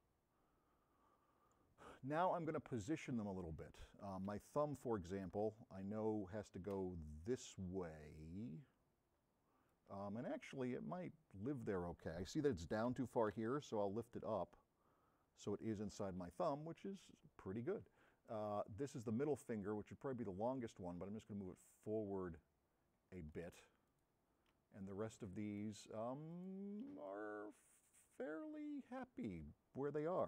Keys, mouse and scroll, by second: 1.4 middle click, 4.9 v, 5.4 c, 12.9 v, 18.3 middle click, 19.8 v, 24.6 v, 27.1-29.5 drag, 27.1 v.